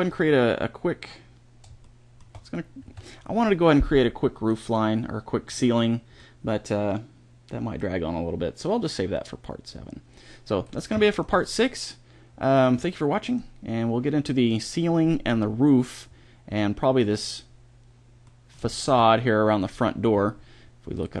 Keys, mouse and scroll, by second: 2.7 a, 3.3-4.8 middle drag, 6.0-7.7 middle drag, 10.9-11.4 middle drag, 13.1-14.1 middle drag, 16.1-17.2 middle drag, 18.1-21.2 middle drag.